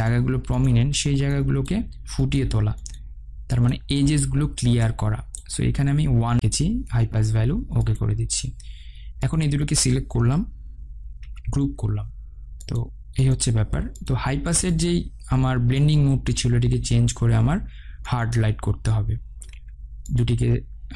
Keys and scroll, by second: 11.8 ctrl+g.